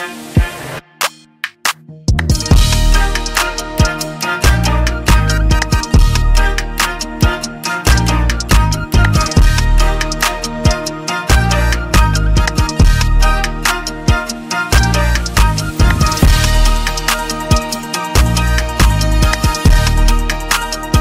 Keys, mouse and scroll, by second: 1.2 click, 4.6 click, 12.6 click, 17.0 click, 19.7 click.